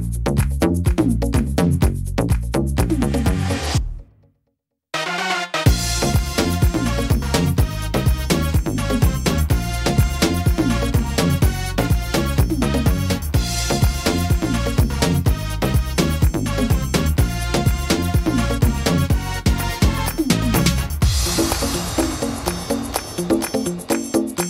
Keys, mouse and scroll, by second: 0.3 right click, 1.0 shift+middle click, 1.7 shift+right click, 2.1 middle click, 2.4-3.3 scroll down 1, 3.5-4.0 scroll down 1, 3.5 e, 8.7 ctrl+z, 9.1 middle click, 9.7-11.2 scroll up 3, 11.5 ctrl+r, 13.6 click, 14.5 right click, 15.2 shift+right click, 16.0 shift+right click, 16.7 right click, 17.5 shift+right click, 17.9 shift+middle click, 18.7 shift+middle click, 19.3 middle click, 19.8 shift+scroll down 1, 20.2 shift+middle click, 20.5-21.8 scroll down 2, 20.8 middle click, 21.8 e, 23.8 middle click.